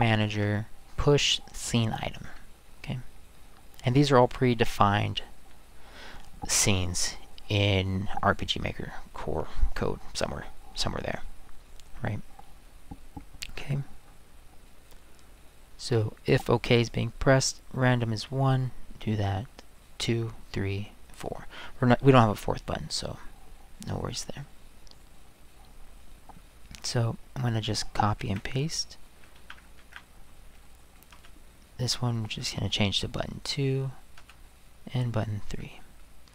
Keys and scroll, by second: 0.3 BackSpace, 28.2 ctrl+c, 29.4 ctrl+v, 29.8 ctrl+v, 31.1 space, 32.4 2, 34.2 space, 35.5 3.